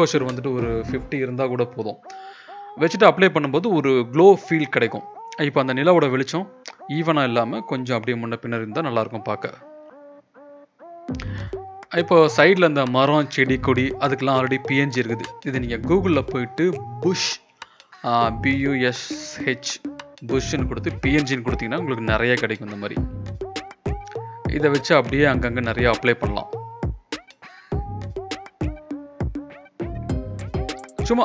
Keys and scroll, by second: 5.0 v, 7.4 ctrl+v, 8.3 ctrl+z, 11.0 alt+Tab, 13.8 ctrl+shift+], 14.6 ctrl+t, 18.4 ctrl+z, 19.8 ctrl+z, 21.3 ctrl+t.